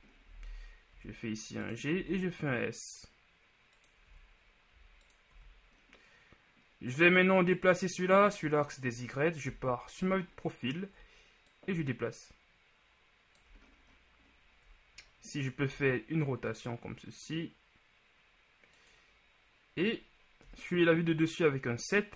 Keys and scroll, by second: 1.0 g, 9.6 ctrl+KP_3, 15.8 r, 20.6 KP_7.